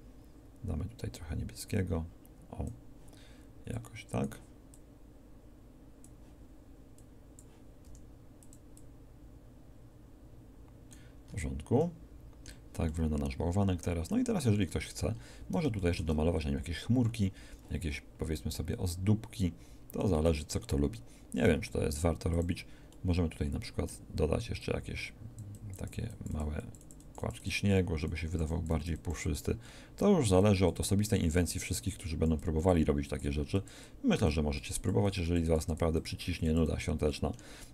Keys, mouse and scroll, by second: 1.4-3.7 drag, 7.8 f, 21.4 f, 37.0-37.7 middle drag.